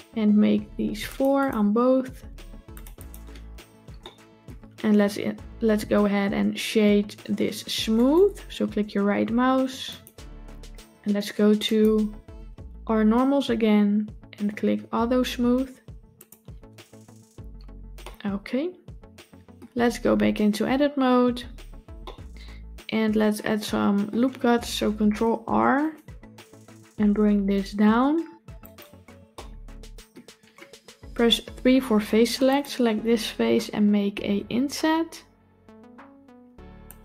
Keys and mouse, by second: 1.0 click, 2.8 click, 3.9-4.3 shift+middle drag, 7.8-10.0 right drag, 17.9-19.4 middle drag, 19.4 Tab, 21.2 Tab, 21.9-24.0 middle drag, 24.9 ctrl+r, 29.2 middle click, 31.8 3, 34.4 i.